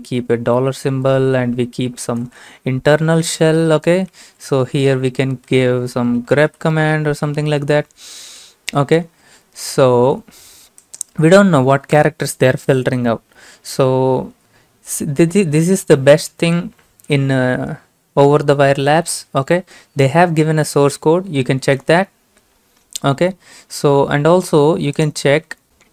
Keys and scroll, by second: 0.6 typing, 2.0-4.9 typing, 2.8 Left, 6.0-8.4 typing, 11.9 BackSpace.